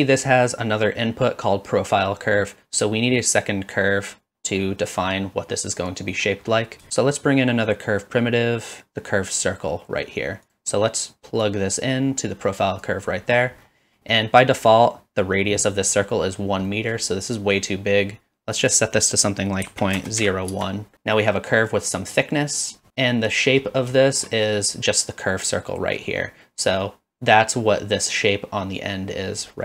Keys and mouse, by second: 0.0 middle click, 6.1 middle click, 6.9 shift+a, 11.5-12.8 drag, 14.2 middle click, 16.7 middle drag, 17.4 middle click, 18.6-20.9 drag, 21.9 middle drag, 22.6 click, 22.9 middle click, 22.9 KP_Decimal, 24.0 shift+middle click, 24.8-26.0 drag.